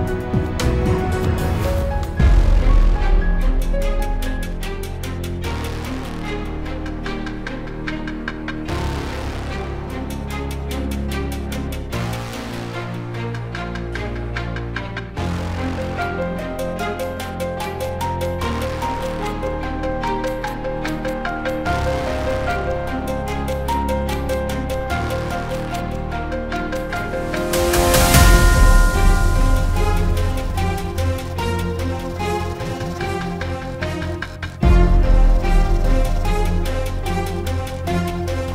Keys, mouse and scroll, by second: 0.4 ctrl+o, 2.4 click, 3.2 click, 8.7 F4, 10.2 F9, 12.1 click, 14.7 ctrl+o, 17.6 click, 18.5 click, 22.6 F4, 24.1 F9, 26.9 click, 28.0 click, 29.3 ctrl+o, 31.1 click, 32.0 click, 34.7 click, 35.6 F4, 36.6 F9.